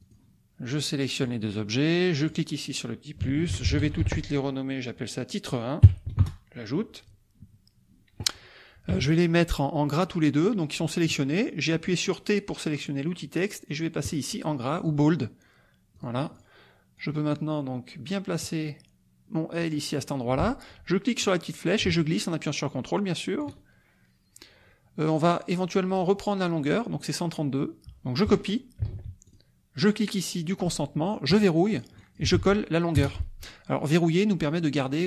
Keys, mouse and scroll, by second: 0.0 click, 0.7 click, 2.2 click, 3.4-4.3 typing, 6.2 Return, 8.9 t, 14.0 click, 15.9 click, 16.3 click, 17.0-19.8 drag, 21.2-23.6 drag, 25.2 click, 28.8 ctrl+c, 29.3 ctrl+click, 29.8 click, 31.3 click, 31.7 click, 32.3 ctrl+v, 32.9 ctrl+Return.